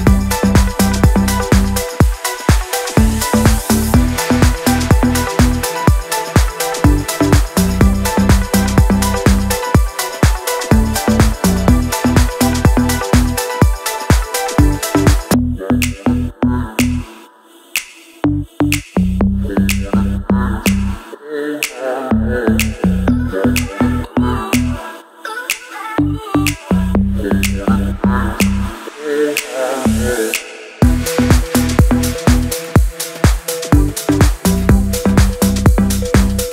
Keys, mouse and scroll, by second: 1.0-4.5 drag, 7.1 ctrl+z, 7.8 shift+click, 9.1 c, 9.3 click, 12.8 c, 13.0 click, 14.3 right click, 14.7 ctrl+click, 15.7 click, 16.0 right click, 16.1 click, 16.7 ctrl+a, 17.6-18.9 typing, 20.0-21.3 typing, 22.4-23.4 typing, 24.4 click, 27.1-28.7 shift+drag, 29.1 c, 29.3 click, 30.7 shift+click, 32.0 c, 32.3 click, 32.7 Up, 33.2 click, 34.8 click.